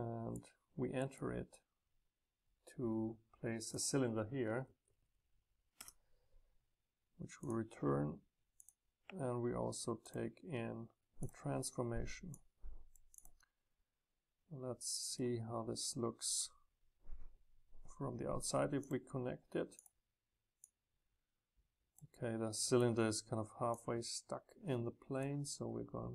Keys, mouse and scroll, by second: 0.0 click, 3.6-5.7 drag, 5.7 Return, 8.6-15.1 ctrl+drag, 12.3 scroll down 2, 18.8-22.7 drag, 23.7-24.5 drag.